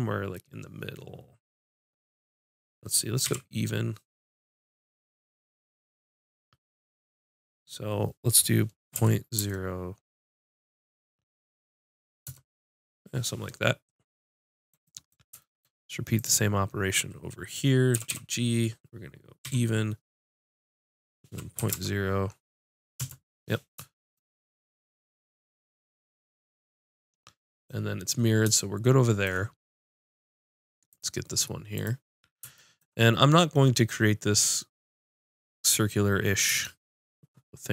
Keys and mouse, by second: 16.1-18.0 drag, 17.9 g, 24.8 middle click, 30.9-35.7 drag.